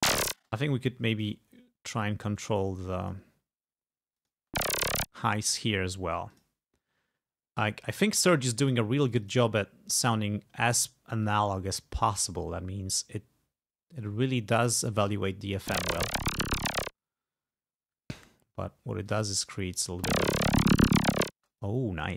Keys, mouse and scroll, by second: 1.2 right click, 2.4 click, 3.1 click, 4.2 click, 4.4 space, 5.2 space, 5.5 right click, 6.3 click, 8.3 click, 9.1 click, 11.3 click, 12.1 click, 14.0-15.1 drag, 15.6 space, 17.0 space, 19.1 click, 19.9 space, 21.4 space, 21.6 click.